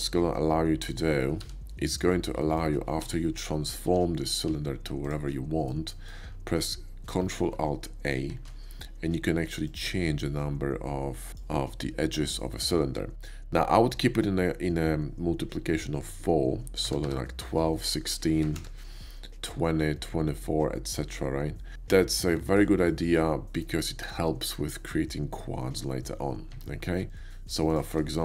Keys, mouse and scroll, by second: 0.4 middle click, 0.8 click, 1.5 g, 1.9 click, 2.4 middle click, 3.8 r, 5.0 ctrl+click, 5.3-5.7 ctrl+middle drag, 5.9 ctrl+middle click, 9.6-11.3 shift+drag, 16.9 1, 17.4 2, 18.4 BackSpace, 18.6 6, 21.9 middle click, 22.1 middle drag, 22.4 shift+middle click, 22.9-23.6 shift+middle drag, 26.6 Tab, 27.1 click, 27.7 shift+click.